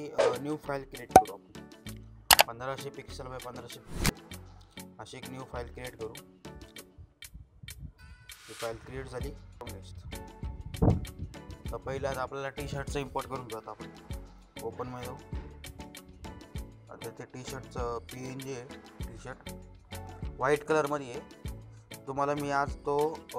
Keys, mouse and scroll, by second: 0.3 click, 3.5 click, 6.0 click, 9.0 click, 13.2-16.3 drag, 17.7 click.